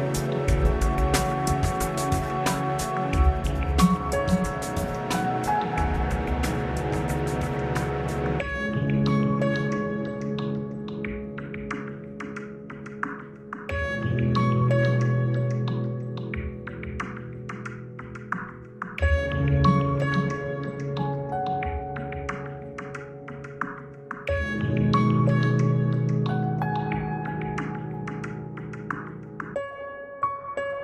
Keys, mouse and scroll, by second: 1.1 F9, 6.0 F9, 8.3 shift+h, 10.8 middle click, 10.8 scroll up 2, 11.3 middle click, 11.3-11.7 scroll up 2, 12.1-14.5 middle drag, 17.9 a, 22.6 ctrl+alt+shift+m, 25.1-26.1 scroll up 4, 28.6 a.